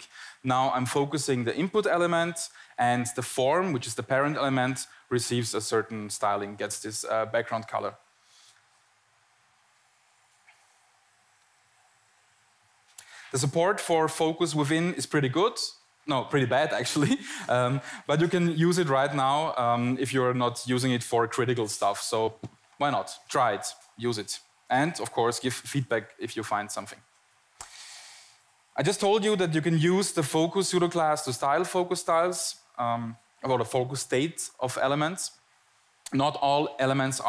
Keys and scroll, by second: 0.2 Tab, 2.5 Tab, 2.9 Down, 3.4 Down, 3.5 Down, 5.0 Return, 5.6 Tab, 8.2 Tab, 9.8 Tab.